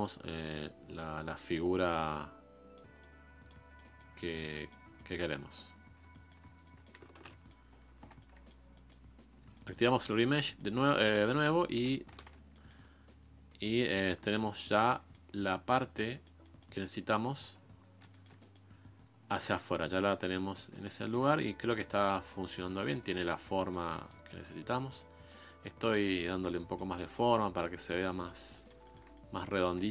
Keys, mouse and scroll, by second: 3.7 middle click, 4.5-4.9 scroll up 1, 4.9 middle click, 5.5-6.1 scroll up 1, 6.1 shift+middle click, 6.4 scroll down 1, 6.5 middle click, 7.0-8.5 scroll up 2, 7.2 middle click, 8.5 middle click, 9.0-9.5 scroll up 2, 9.5 shift+middle click, 10.1 scroll up 1, 10.3 scroll down 1, 10.5 middle click, 11.1 shift+click, 11.9 scroll down 1, 12.1 ctrl+z, 12.5-14.4 middle drag, 14.4-15.1 scroll up 2, 14.5 middle click, 15.1 scroll down 1, 15.3 scroll up 1, 15.4-17.8 middle drag, 17.8-18.1 scroll down 2, 18.1-20.3 shift+middle drag, 20.3-20.8 scroll up 4, 20.8-22.3 shift+middle drag, 22.3-26.4 drag, 26.4-27.9 middle drag, 27.9 scroll down 3, 28.1-29.5 middle drag, 29.5-29.9 scroll up 1.